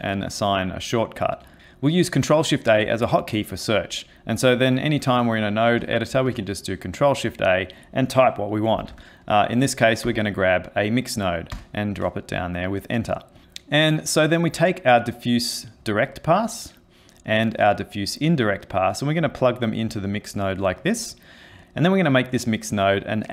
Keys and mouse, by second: 6.1 ctrl+shift+a, 13.4 click, 14.3 click, 17.4 click, 20.8 click.